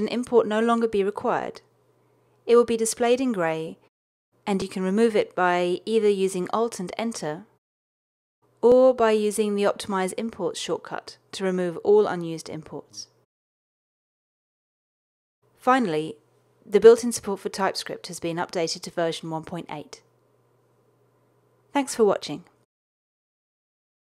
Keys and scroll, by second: 6.2 alt+Return, 7.1 alt+Return, 9.6 super+z, 10.6 alt+super+o.